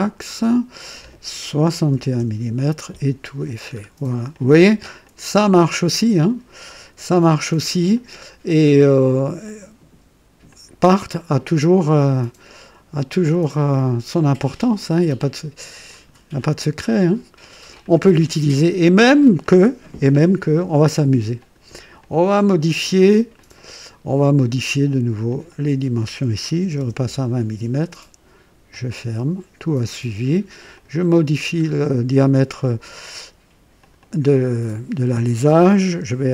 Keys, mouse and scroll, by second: 0.2 click, 1.6 KP_6, 1.9 KP_1, 2.2 Return, 3.6 scroll down 1, 4.3 click, 5.0 click, 6.2 ctrl+click, 7.0 ctrl+d, 7.9 ctrl+click, 9.4 click, 10.5 click, 12.1 click, 13.2 click, 14.9 click, 15.9 click, 16.4 click, 17.8 click, 18.5-19.3 drag, 19.4 click, 21.4 click, 22.0 click, 23.3 click, 25.3 click, 26.6 KP_2, 26.7 KP_0, 27.0 Return, 28.7 click, 30.7 click, 31.6-31.9 scroll up 2, 33.8 click.